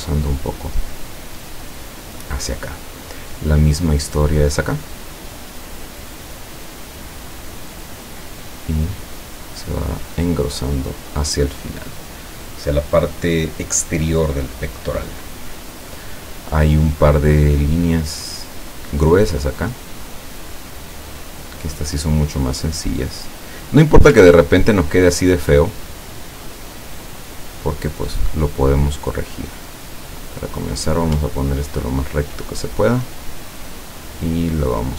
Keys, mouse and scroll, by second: 1.8 click, 6.8 click, 7.9-9.0 drag, 10.7 click, 19.5 click, 20.2-21.2 drag, 22.7 click, 24.4-24.9 ctrl+scroll up 2, 25.1 ctrl+scroll down 2, 26.3 click, 27.8 click, 29.0-32.3 drag, 32.8-34.9 drag.